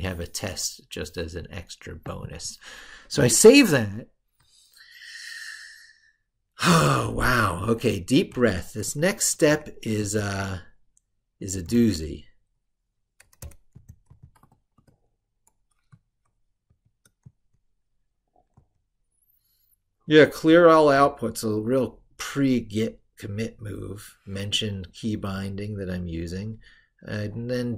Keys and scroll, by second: 6.9 ctrl+super+Left.